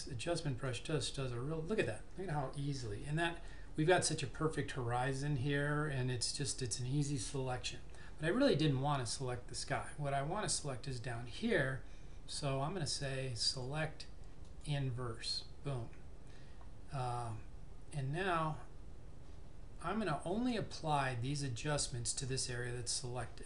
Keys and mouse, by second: 13.5 click.